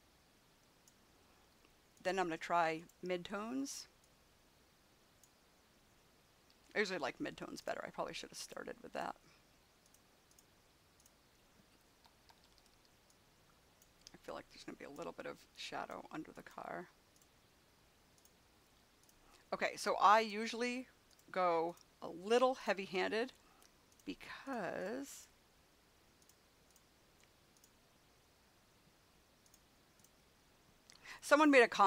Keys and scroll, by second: 6.4 ], 11.9 [.